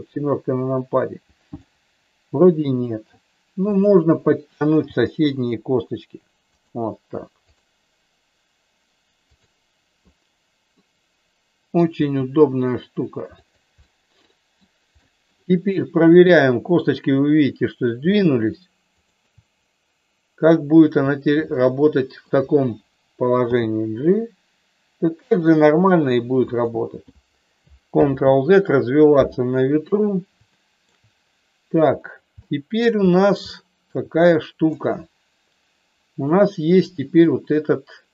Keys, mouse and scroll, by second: 1.6-3.0 middle drag, 3.6-4.9 drag, 5.2 g, 6.5 click, 7.5-8.8 drag, 10.8-11.8 middle drag, 12.1 g, 13.9 middle click, 14.9 middle click, 16.0-17.5 drag, 18.0-19.5 shift+drag, 21.5 middle click, 23.4 g, 26.4 click, 28.0 ctrl+z, 30.4 shift+middle click, 32.4 shift+middle click, 33.5 shift+middle click, 34.7-36.3 middle drag, 37.2 middle click.